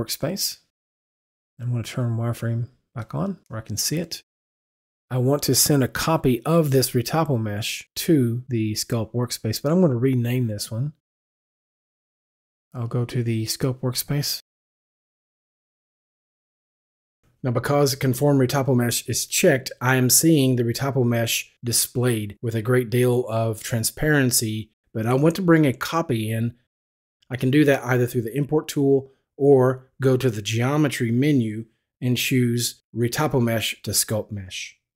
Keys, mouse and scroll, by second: 1.5 click, 2.7 click, 11.2-13.7 typing, 14.0 Return, 16.5 click, 16.7 F11, 34.0 F11, 34.1 click.